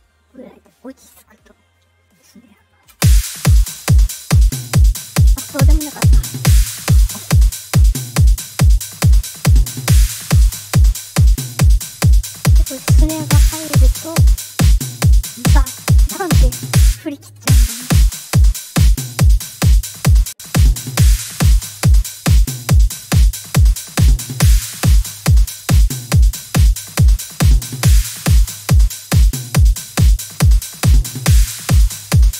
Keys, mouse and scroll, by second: 2.4 click, 2.8 space, 9.1 click, 14.1 click, 16.8 space, 17.3 space, 18.9-22.0 drag, 23.6 click, 26.6-27.8 drag, 29.6-32.0 drag.